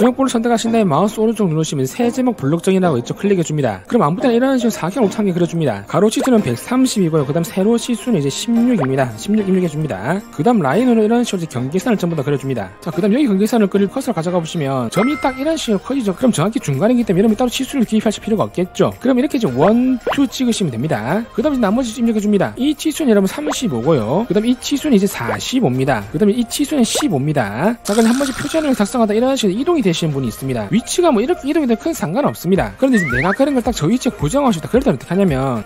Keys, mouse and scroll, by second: 0.9 click, 1.5 right click, 4.7 3, 5.1 click, 5.7 click, 5.9 click, 6.2 click, 6.3-7.2 typing, 8.6 click, 8.8 click, 10.0 click, 10.7 1, 11.1 click, 12.0 click, 19.8 click, 21.0 click, 23.2 click, 23.4-24.4 typing, 23.5 click, 25.0 click, 25.3 click, 25.5 4, 25.8 5, 26.7 click, 27.0 click, 27.2 1, 27.5 5, 32.1 ctrl+z.